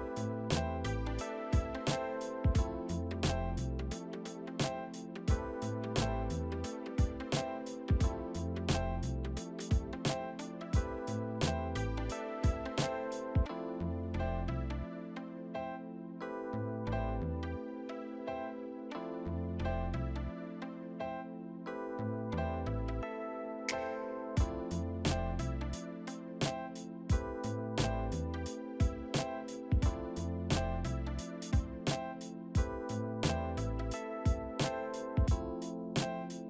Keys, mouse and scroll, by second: 0.3 alt+shift+middle click, 5.1 alt+click, 7.2 alt+shift+middle click, 12.5 double click, 13.0 double click, 13.6-21.9 typing, 23.3 1, 26.2 alt+click, 28.2 middle click, 28.3 middle click, 31.6 alt+click, 33.1 alt+click.